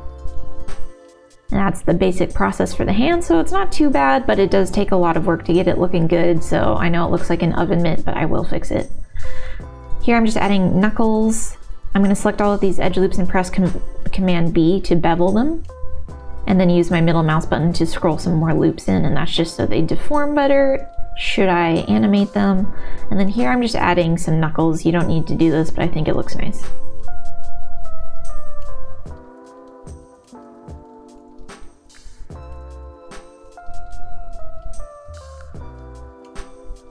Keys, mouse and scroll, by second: 0.1 alt+click, 1.0 middle click, 1.5 middle click, 2.3 middle click, 3.4 s, 4.8 alt+click, 5.8 s, 6.7 ctrl+r, 7.4 ctrl+r, 12.2 alt+shift+click, 14.0 ctrl+b, 16.3 click, 16.8-18.5 middle drag, 19.3 ctrl+b, 21.3 ctrl+r, 23.0 middle click, 23.1 click, 23.4 s, 24.2 o, 25.1 s, 25.7 ctrl+z, 26.2 ctrl+r, 29.4 ctrl+r, 31.1 alt+click, 31.7 g, 32.4 middle click, 32.7 shift+middle click, 33.8 ctrl+z, 33.8 middle click, 35.0 middle click, 35.3 shift+click, 36.1 middle click.